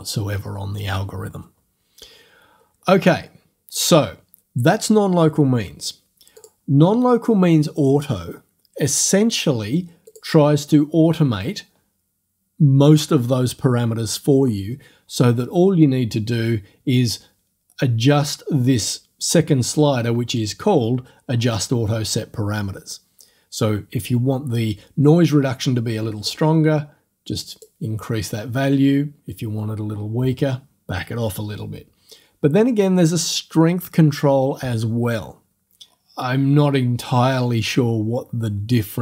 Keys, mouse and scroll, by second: 6.4 click, 10.1 click, 26.3-27.8 drag.